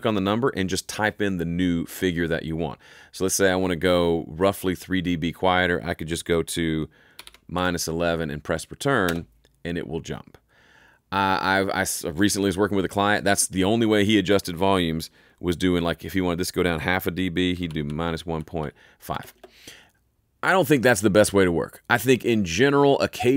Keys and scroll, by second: 7.1 -, 7.2 |, 9.0 Return, 17.4-19.1 typing, 19.3 Return.